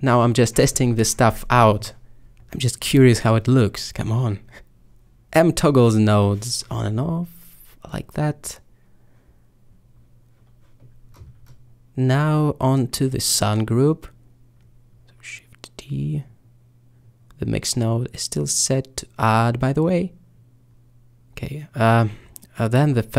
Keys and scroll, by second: 1.0 typing, 5.5 b, 7.0 b, 8.0 b, 8.5 b, 9.4 b, 10.7 b, 12.2 b, 13.3 b, 14.8 b, 19.5 b.